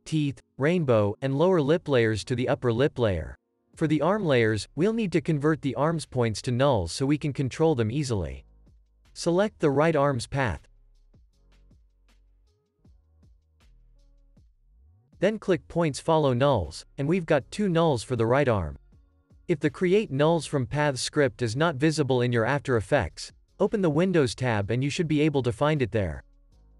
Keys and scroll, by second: 2.3 space.